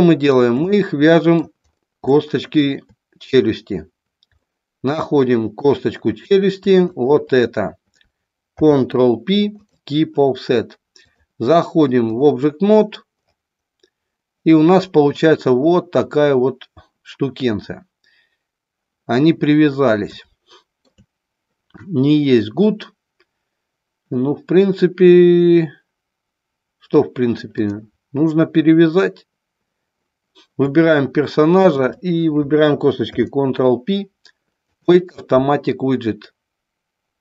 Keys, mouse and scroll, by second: 0.7 middle click, 2.0 shift+middle click, 4.5-5.8 middle drag, 6.9 shift+click, 8.4 ctrl+p, 11.1-12.3 drag, 20.1-20.8 shift+middle drag, 31.6 shift+click, 33.0 ctrl+p.